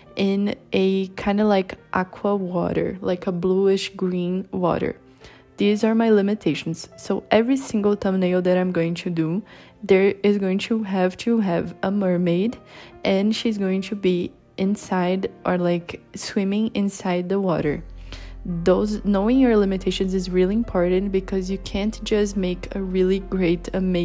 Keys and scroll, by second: 18.5 b.